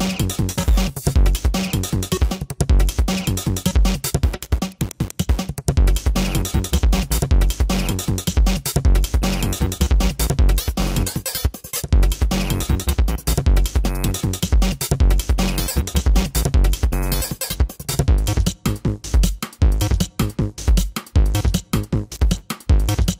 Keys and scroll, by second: 22.3 ctrl+alt+z, 22.9 ctrl+alt+z.